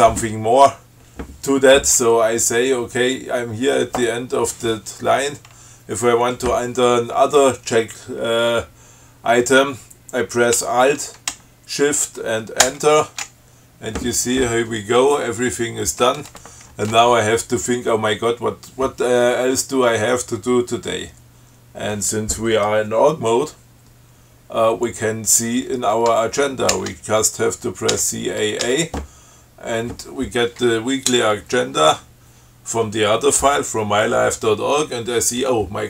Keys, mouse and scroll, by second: 12.9 alt+shift+Return, 27.0 ctrl+c, 28.2 a, 28.9 a.